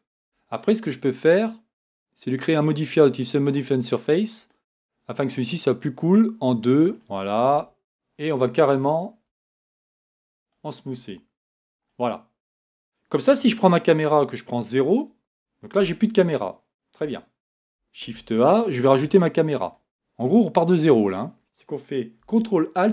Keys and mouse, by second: 0.2 Tab, 7.5 Tab, 9.3 Tab, 11.5 z, 14.1 KP_0, 18.0 a.